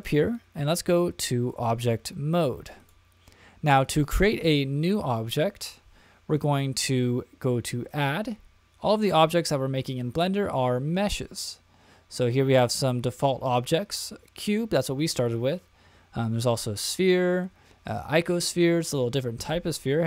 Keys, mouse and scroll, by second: 0.0-1.6 drag, 2.8 click, 7.9-20.0 drag.